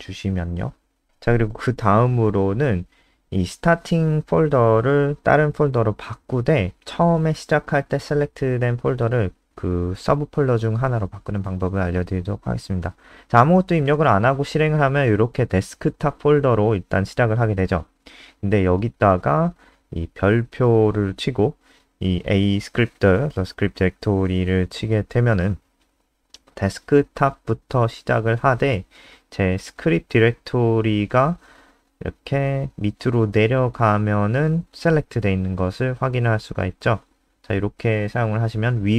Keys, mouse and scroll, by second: 0.3 click, 3.6 ctrl+Left, 3.8 ctrl+Left, 10.7 *, 11.5 Left, 11.9 shift+End, 12.3 ctrl+x, 12.4 BackSpace, 15.3 click, 16.3 Return, 16.9 ', 21.9 ctrl+v, 23.7 click, 25.2 ctrl+s, 26.4 Home, 26.8 Left, 27.0 Left, 28.7 click, 29.4 ctrl+s, 29.7 F5, 34.4-38.9 scroll down 2.